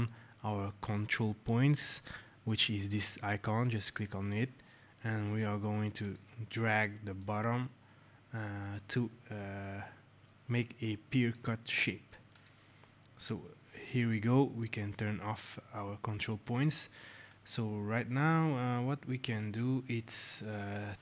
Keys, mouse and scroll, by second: 3.7 click, 6.0 click, 12.2 click, 14.8 right click, 17.2 click.